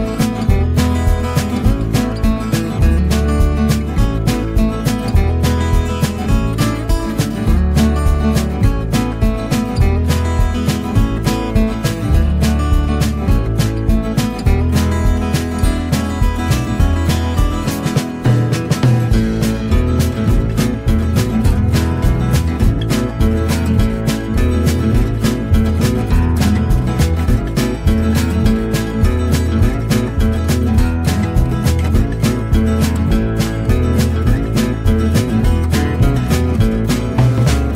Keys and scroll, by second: 0.0-1.1 typing, 9.3 Return, 17.8 Return, 24.6 Return.